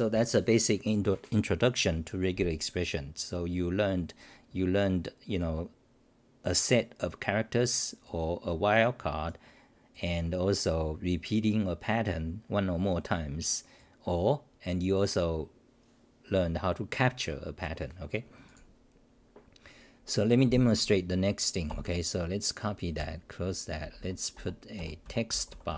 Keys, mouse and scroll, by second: 22.9 ctrl+w, 23.8 c, 24.0 c, 25.0 Return.